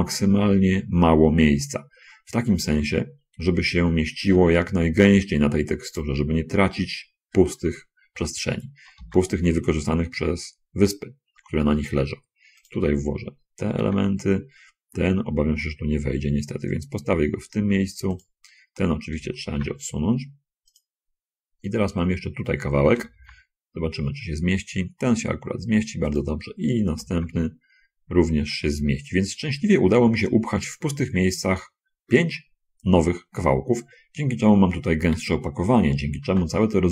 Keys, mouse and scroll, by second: 6.2 click, 9.2 l, 9.3 g, 14.0 l, 14.2 g, 18.5 click, 19.5 l, 19.9 g, 21.1 click, 22.3 scroll up 1, 23.3 l, 23.5 g, 27.2 l, 27.5 g, 30.8 click, 31.7 scroll down 1.